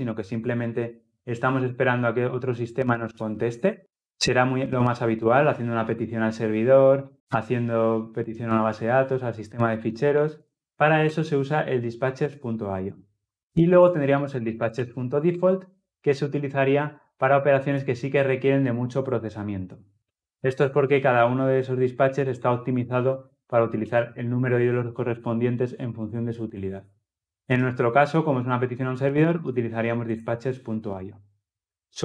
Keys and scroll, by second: 10.9 Return, 15.2 Return.